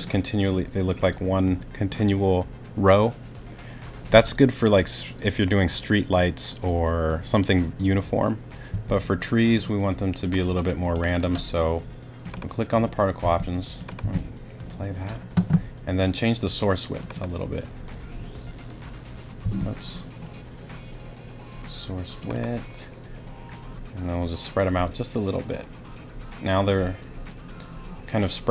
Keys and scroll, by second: 8.7 space, 13.2 space, 19.4 space.